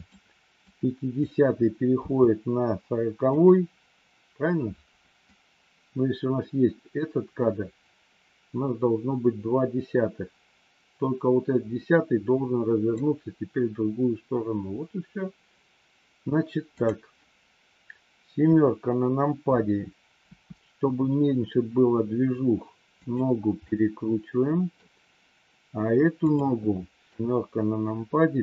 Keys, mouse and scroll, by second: 0.6 click, 1.9 g, 5.3-12.9 drag, 16.7 click, 18.3 KP_7, 20.2 r, 23.6-24.7 middle drag, 26.1 click, 27.1 KP_7, 28.3 r.